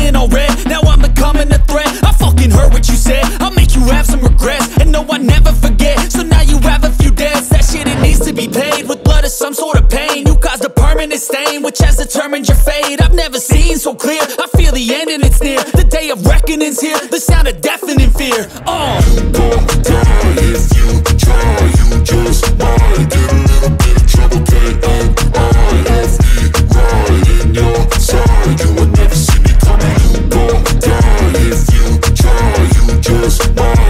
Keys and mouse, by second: 0.1-2.0 typing, 0.2 click, 1.0 ctrl+z, 1.5 click, 2.0 ctrl+z, 3.1 click, 4.3 click, 4.8 click, 5.4 ctrl+z, 5.6 click, 6.9 click, 7.9 a, 9.5 click, 10.2 ctrl+z, 11.8 click, 12.6 click, 15.1 click, 15.7 ctrl+z, 16.1 click, 17.3 click, 22.2 click, 23.0 ctrl+z, 23.9 click, 25.3 click, 26.0 click, 28.2 click, 28.9 click, 29.3 click, 29.6 click, 29.9 click, 30.8-32.6 drag, 33.1 click, 33.5-33.8 drag.